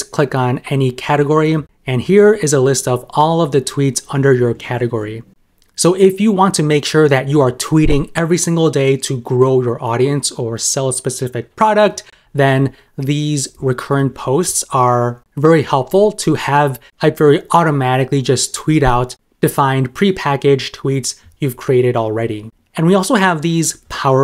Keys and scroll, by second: 13.6 super+m.